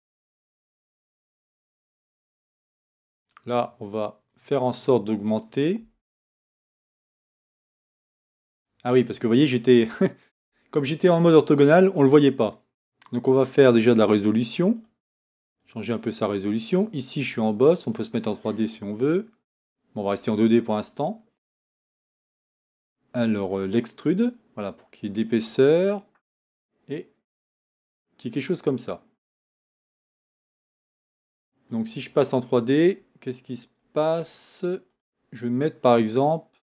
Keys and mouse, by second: 1.1 Tab, 5.8 Tab.